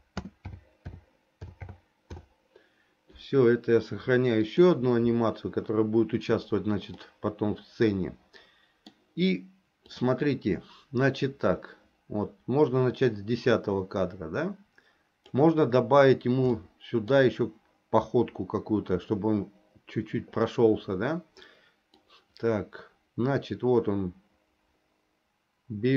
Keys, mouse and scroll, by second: 7.0-9.1 middle drag, 10.0-15.5 drag, 16.6 middle click, 22.1-25.9 drag.